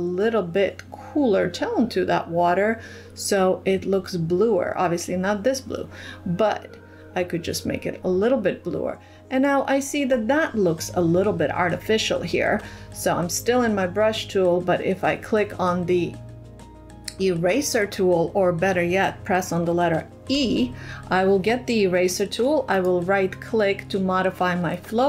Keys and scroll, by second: 20.1 e.